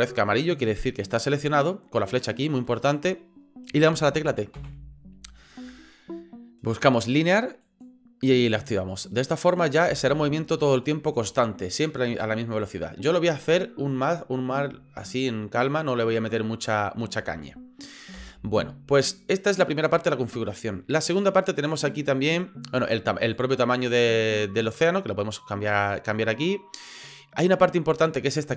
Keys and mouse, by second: 4.6 t, 9.6 click, 9.8 space, 18.1 space, 18.5-19.9 drag, 23.3-26.9 drag.